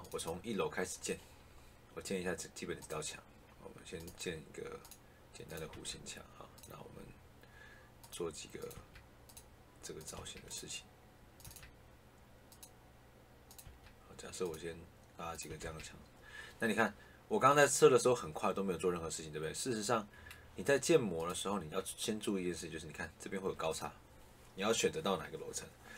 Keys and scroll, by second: 5.6 Escape, 8.7 Escape, 10.0 Escape, 11.3 Escape, 13.5 Escape, 15.4 Escape.